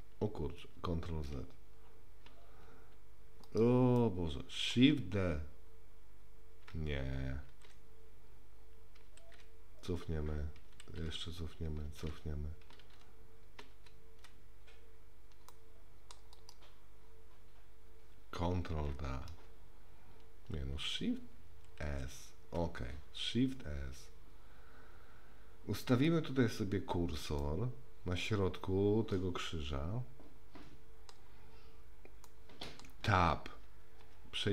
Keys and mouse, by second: 4.0 middle click, 5.1 shift+d, 21.8 shift+s, 27.5-31.1 middle drag, 32.3 middle click, 34.0 Tab.